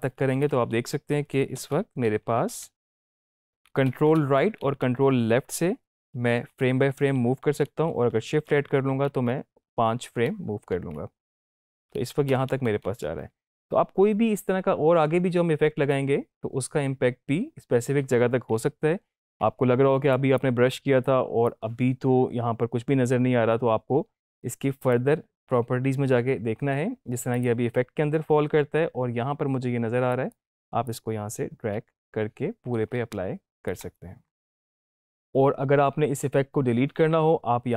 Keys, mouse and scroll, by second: 1.5 Left, 2.7 drag, 5.2 ctrl+Right, 6.3 =, 6.6 =, 6.7 =, 7.2 ctrl+Right, 8.4 ctrl+shift+Right, 9.0 ctrl+shift+Left, 11.2 ctrl+shift+Right, 11.4 ctrl+shift+Left, 18.9 -, 19.1 -, 19.2 -, 20.1-21.6 drag, 24.7 click, 27.5 click, 30.0-33.6 drag.